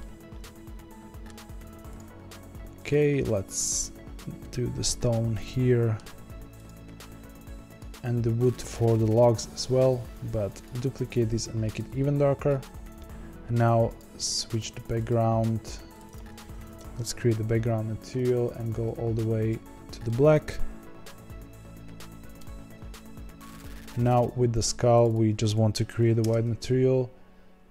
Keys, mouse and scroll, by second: 1.9 click, 3.8-5.3 drag, 5.3-6.6 middle drag, 6.6 click, 8.6-12.4 drag, 13.9 click, 15.0 click, 15.9 click, 16.0-18.8 drag, 20.0-23.5 middle drag, 23.5 click, 24.5 click, 24.9 click, 25.0-27.7 drag.